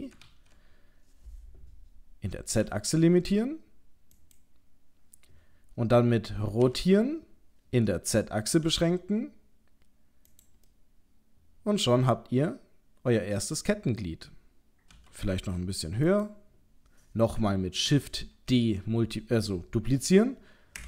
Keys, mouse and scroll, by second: 0.3 d, 10.6 middle click, 18.5 shift+d.